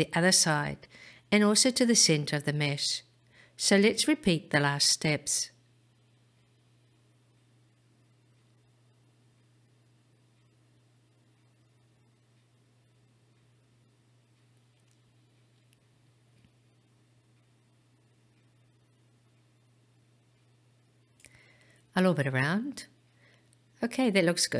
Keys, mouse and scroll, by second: 5.5 ctrl+r, 10.9 ctrl+r, 13.8 right click, 18.4-24.5 middle drag.